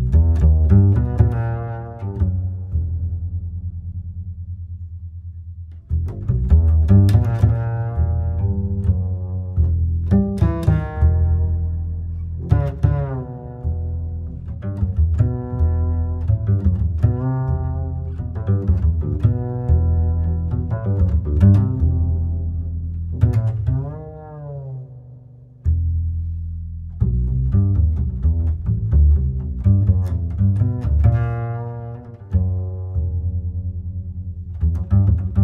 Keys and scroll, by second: 16.6 ctrl+z, 19.5 Home, 21.7 Delete, 26.0 ctrl+j, 30.4 ctrl+e, 31.0 ctrl+e, 34.7 ctrl+j.